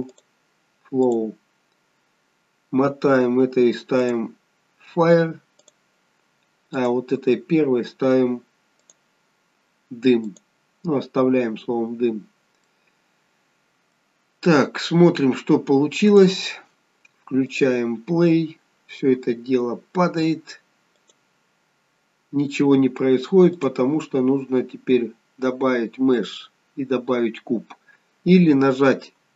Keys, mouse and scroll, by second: 0.1 click, 1.8-2.6 scroll down 3, 4.0 click, 6.7 click, 8.8 click, 12.3-12.6 scroll up 1, 12.6 middle click, 14.5-15.3 scroll down 2, 16.1 click, 17.4 click, 21.0 click, 23.5 click.